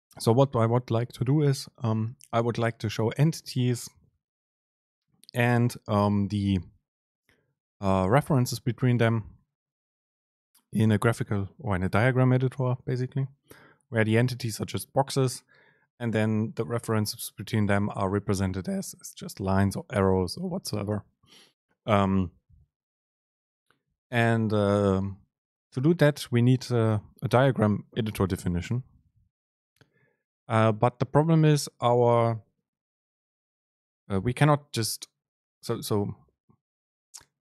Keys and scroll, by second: 29.7 Delete.